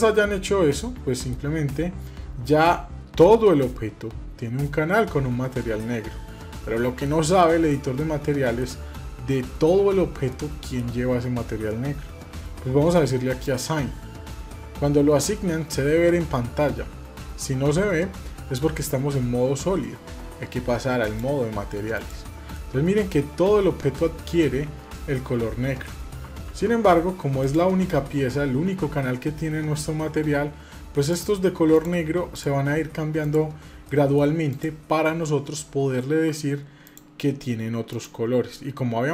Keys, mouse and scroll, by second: 5.6-6.8 middle drag, 7.1-8.4 shift+middle drag, 10.1 shift+middle click, 13.0 click, 20.8 click, 21.7 click, 22.3-25.6 middle drag, 27.2 click, 28.4 ctrl+z, 30.7 click, 31.5 click, 32.1 click, 32.9 click, 33.6 shift+middle click, 34.3 click, 36.6 click, 37.7 click.